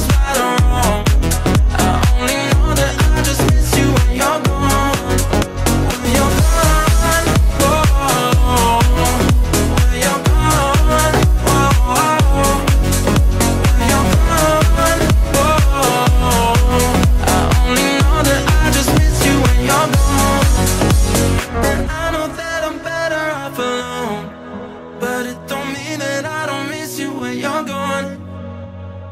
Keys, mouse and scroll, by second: 1.1 shift+d, 1.8 r, 3.6-3.9 scroll up 2, 3.9-5.1 middle drag, 5.1-5.5 scroll up 2, 5.5 shift+middle click, 5.8 z, 6.2 z, 6.6 z, 7.1 click, 7.5-9.1 drag, 9.5 click, 9.6 F7, 11.2 n, 11.8 click, 12.4 click, 12.8 middle click, 13.3-13.7 scroll up 7, 14.0-14.4 middle drag, 14.4 click, 14.8 middle click, 15.2 click, 15.4-16.0 middle drag, 16.0 click, 16.5 click, 16.9 shift+a, 20.5 middle click, 21.0 click, 21.9 shift+a, 25.5-26.5 drag, 26.5 middle click, 27.2 click, 29.0 click.